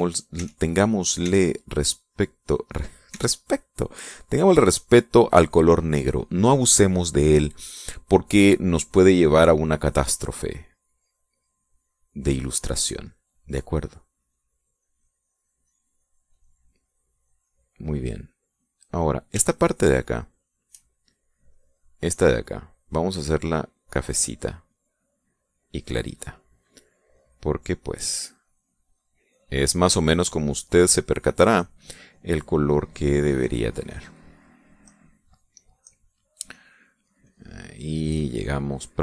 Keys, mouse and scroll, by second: 0.3 e, 1.2 click, 1.7 e, 1.8-3.5 drag, 3.6 e, 4.6-6.5 drag, 8.9-12.8 drag, 13.6 middle click, 14.7-16.8 drag, 16.9-18.3 middle drag, 18.3-19.4 middle drag, 20.0-21.4 shift+drag, 22.1 middle click, 23.7-25.2 drag, 26.0 click, 27.7-30.6 drag, 30.7-35.2 drag, 35.5 middle click, 35.9-36.4 scroll up 1, 36.4 middle click, 37.0-39.0 drag.